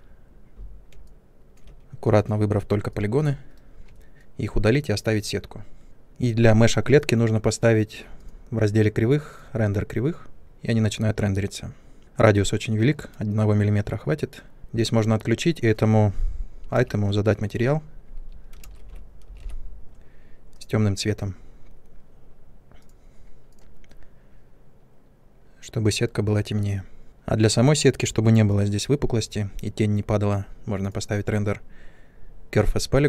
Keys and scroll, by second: 3.4 Delete, 16.7 m, 18.6-19.3 typing.